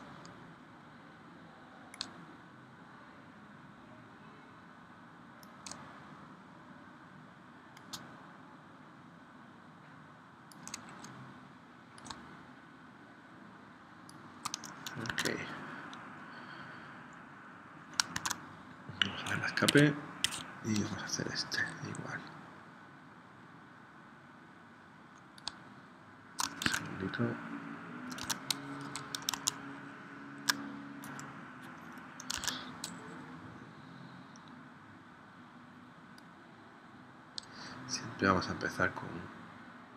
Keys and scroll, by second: 15.1 super+Tab, 18.1 super+Tab, 19.8 Escape, 20.4 super+z, 26.6 super+Tab, 28.2 super+Tab, 29.3 super+Tab, 32.5 super+z.